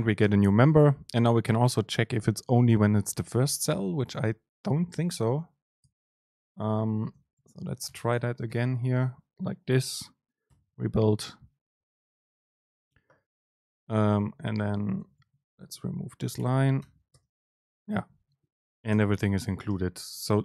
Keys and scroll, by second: 1.6 Left, 5.2 shift+Left, 7.0 super+x, 7.2 Left, 7.9 Return, 8.8 super+v, 10.6 ctrl+shift+super+F9, 14.7 shift+Left, 16.4 BackSpace, 16.9 Return, 17.2 super+space.